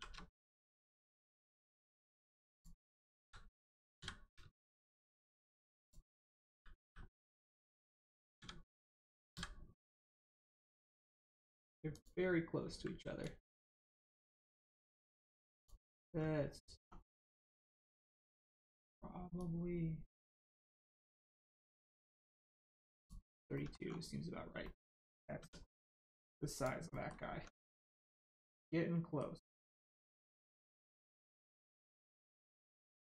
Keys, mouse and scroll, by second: 0.9 right click, 2.5 click, 3.1 ctrl+z, 3.9 z, 4.5 click, 6.4-6.7 scroll down 1, 6.8 s, 7.1 middle click, 7.5 right click, 8.3 a, 11.9 click, 13.2 shift+click, 16.1 scroll down 1, 17.4 middle click, 19.3 shift+click, 24.6 middle click, 25.4 Tab, 25.7 middle click, 26.5 click, 26.9 middle click, 27.3 Tab, 27.7 middle click, 30.1 click, 30.3 shift+middle click, 31.3 middle click, 31.4 middle click, 33.0 shift+middle click.